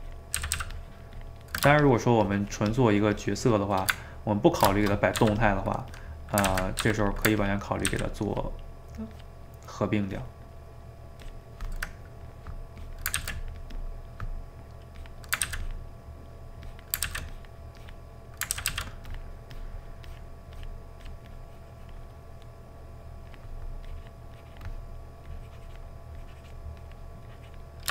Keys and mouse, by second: 0.4 ctrl+z, 0.6 ctrl+z, 0.8-4.0 ctrl+drag, 4.0-5.2 ctrl+middle drag, 5.2 f, 6.0 click, 6.5 ctrl+z, 6.9 f, 7.4 ctrl+click, 7.9 ctrl+z, 8.3-11.9 ctrl+drag, 11.9 middle click, 12.8 click, 13.2 ctrl+z, 13.4 click, 13.9-15.0 middle drag, 15.0 click, 15.4 ctrl+z, 15.7 click, 16.1 middle click, 16.7 click, 17.1 ctrl+z, 17.3-18.6 drag, 18.6 ctrl+z, 18.7 ctrl+z, 19.1-22.4 drag, 22.4 middle click, 23.3-24.9 drag, 24.9 middle click, 25.3-27.9 drag.